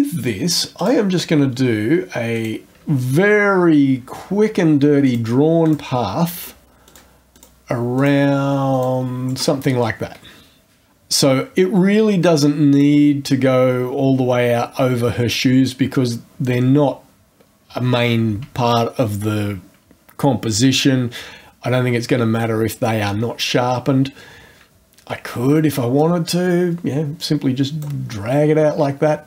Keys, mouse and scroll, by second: 0.8 click, 2.3 click, 5.0 click, 5.6 click, 6.4 click, 6.9 click, 7.3 click, 8.0 click, 8.7 click, 9.3 right click, 12.2 click, 26.0-28.0 drag.